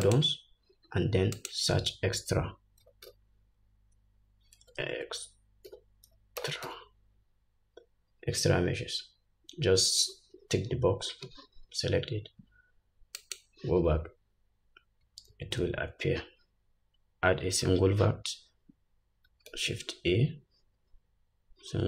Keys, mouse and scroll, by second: 15.8 shift+a.